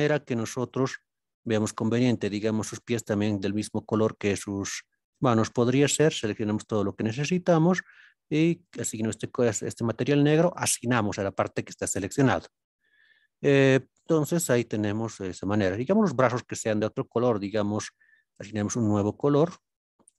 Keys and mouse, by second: 0.6 shift+click, 1.4 shift+click, 2.1 middle click, 2.8 shift+middle click, 3.8 middle click, 4.6 shift+click, 5.1 shift+click, 5.9-7.7 middle drag, 8.6 click, 14.8-15.4 middle drag, 18.4 click, 19.3 drag.